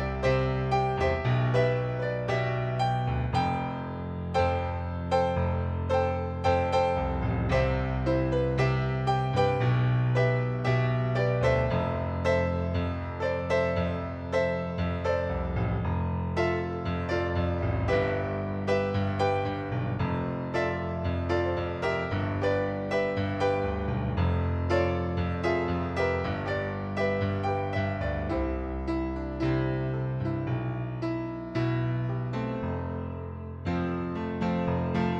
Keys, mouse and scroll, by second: 0.6 click, 2.8 click, 3.7 click, 6.0 click, 7.0 click, 7.9 click, 9.8 right click, 10.7 shift+click, 11.3 click, 12.0 click, 13.5 right click, 14.4 middle click, 15.9 right click, 18.4 click, 19.3 click, 20.3 shift+click, 22.7 click, 25.1 click, 26.3 click, 27.9 right click, 29.0 click, 29.5 middle click, 30.6 middle click, 31.6 ctrl+d, 33.3 ctrl+d, 33.8 ctrl+d, 34.3 ctrl+d, 34.7 ctrl+d.